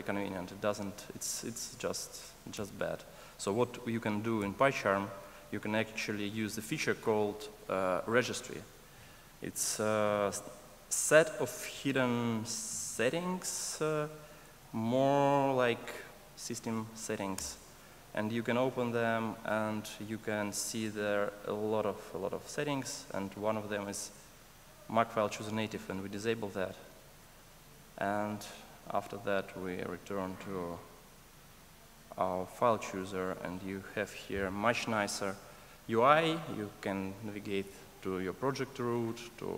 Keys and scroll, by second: 10.9 ctrl+shift+super+a.